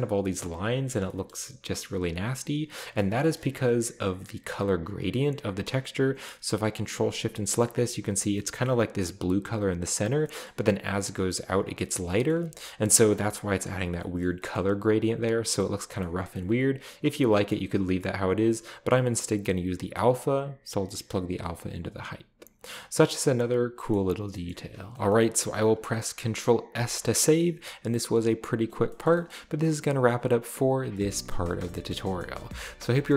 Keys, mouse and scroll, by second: 0.4 scroll up 2, 1.3 shift+middle click, 2.1-3.0 scroll down 3, 2.8 shift+middle click, 3.4 middle click, 6.7 ctrl+shift+click, 7.6-8.2 shift+middle drag, 7.6-8.3 shift+scroll up 1, 8.3-9.0 shift+scroll down 2, 8.3-8.7 shift+middle drag, 10.1-11.0 scroll down 2, 10.2-11.0 shift+middle drag, 11.1 middle drag, 12.0-12.3 scroll down 2, 12.3-13.0 ctrl+middle drag, 12.9 ctrl+shift+click, 14.2 middle click, 14.6-15.6 middle drag, 14.7-17.5 scroll down 4, 16.0-16.3 middle drag, 17.5-18.3 scroll up 1, 20.0-21.5 drag, 22.1-22.6 scroll down 3, 23.0-23.4 middle drag, 23.4 scroll down 1, 23.9 middle click, 24.0-24.9 scroll up 3, 24.5 middle click, 24.9-25.2 shift+scroll down 1, 24.9 shift+a, 25.4-26.1 middle drag, 26.7 ctrl+s, 28.4 click, 28.9 middle click, 29.1 shift+middle click, 29.8 middle click, 30.8 scroll down 2, 30.9-32.0 middle drag, 31.6-32.9 drag.